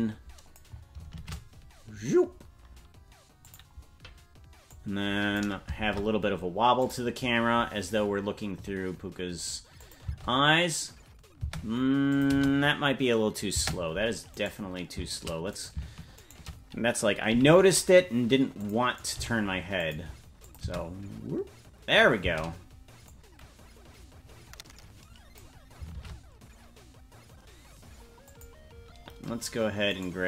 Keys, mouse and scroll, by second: 1.1 shift+`, 4.7 click, 5.7 shift+`, 9.8 click, 10.0 space, 12.1-13.7 drag, 12.1 space, 12.3 space, 13.7 space, 14.3 right click, 16.2-17.3 shift+right drag, 17.3 g, 18.9 right click, 19.2 g, 20.4 click, 20.6 space, 22.2 space, 23.0-25.4 drag, 25.9 shift+`, 29.9 right click.